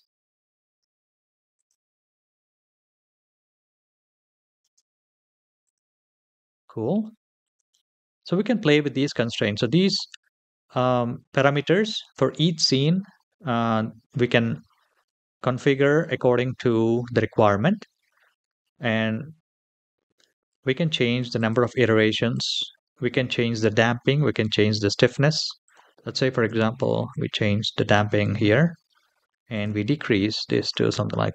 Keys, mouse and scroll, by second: 0.5 space, 1.3 click, 1.8 space, 5.4 click, 5.4 space, 6.8-7.2 shift+middle drag, 21.1 click, 22.1 click, 25.4-26.8 drag, 29.3-30.7 drag.